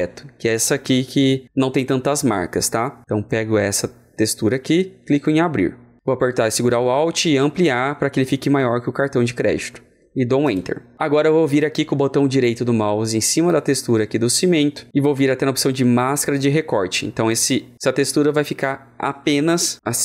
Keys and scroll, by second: 7.0 alt+Return, 10.4 alt+Return.